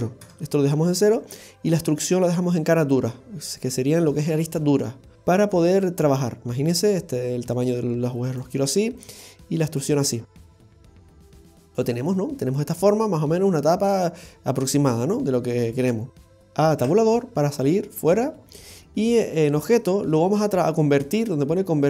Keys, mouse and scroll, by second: 5.8 click, 9.0 click, 10.5 scroll up 1, 10.9 middle click, 10.9 scroll down 1, 11.4 scroll up 1, 11.6-12.1 scroll down 4, 12.1 middle click, 15.9-16.4 scroll up 3, 16.4 shift+middle click, 16.8 Tab, 19.5 click.